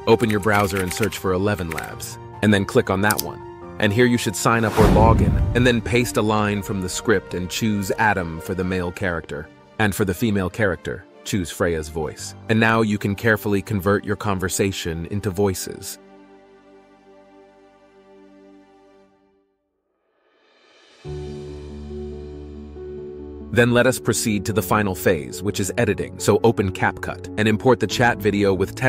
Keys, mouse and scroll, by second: 0.2-2.8 typing, 5.4 ctrl+v, 17.7 ctrl+c, 19.2 ctrl+v, 27.9 click.